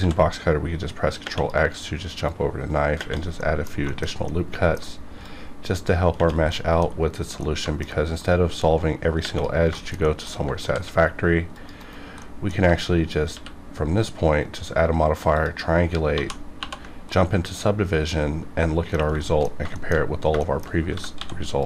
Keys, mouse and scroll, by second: 0.0 ctrl+x, 2.2 click, 3.4 middle click, 3.8 shift+middle click, 4.1 scroll up 1, 4.2 middle click, 4.9 scroll down 1, 5.2 click, 6.5 middle click, 6.9-7.4 scroll up 1, 7.4 middle click, 8.2 click, 9.7 shift+middle click, 9.8 shift+middle click, 10.3 middle click, 10.3 scroll up 1, 10.6 ctrl+r, 10.9-11.4 scroll up 1, 11.4 click, 11.7 right click, 11.8 right click, 12.2 middle click, 13.3 q, 15.3 click, 16.1 ctrl+1, 16.5 ctrl+2, 17.1-18.9 middle drag, 18.9 scroll down 1, 19.2 shift+middle click, 19.5 scroll down 1, 19.7 shift+middle click, 20.4 shift+middle click, 20.9 g, 21.1 x.